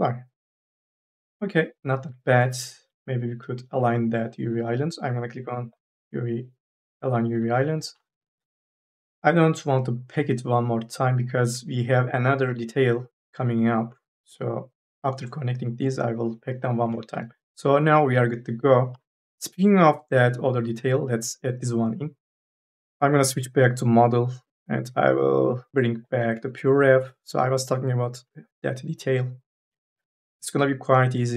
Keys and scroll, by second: 2.6 2, 2.8 e, 7.2 3, 8.0 ctrl+a, 18.7 4, 19.0 e.